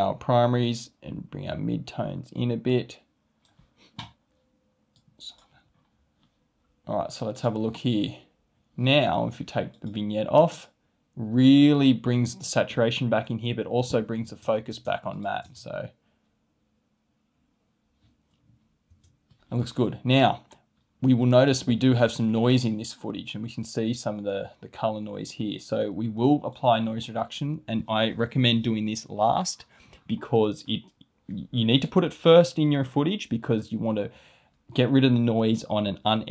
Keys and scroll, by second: 14.3 space, 18.9 space.